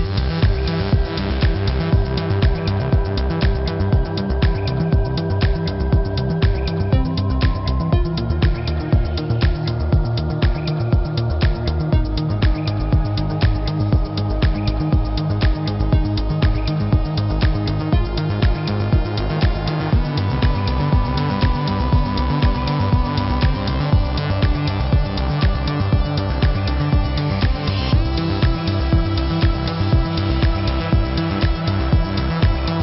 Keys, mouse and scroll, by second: 4.1 space, 4.2 click, 4.5 z, 4.7 click, 5.8 click, 9.2 a, 9.4 click, 10.7 click, 10.8-12.8 typing, 11.6 click, 12.1 shift+click, 13.7 click, 14.5 shift+click, 15.8 shift+click, 17.2 click, 20.0 ctrl+alt+click, 20.9 click, 21.8 click, 22.9 ctrl+click, 24.1 ctrl+click, 25.4 z, 25.8 click, 27.8 right click, 28.6 click, 29.4 alt+click, 30.6 click, 31.6 alt+click, 32.5 click.